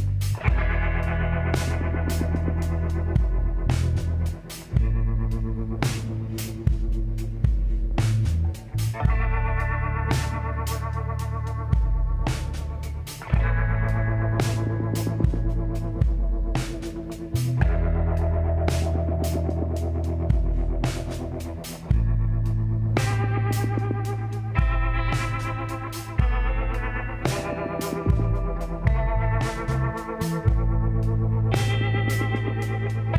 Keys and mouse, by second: 0.3-3.8 drag, 6.1-9.0 drag, 8.4-10.1 middle drag, 10.4-13.4 middle drag, 14.2-15.4 middle drag, 15.4-17.2 drag, 16.2 l, 17.2 middle click, 17.4 h, 19.4 click, 20.2 l, 20.9 l, 21.4-25.4 drag, 24.3 l, 25.4 l, 26.5-28.5 drag, 28.1 middle click, 28.6 KP_1, 31.7 r.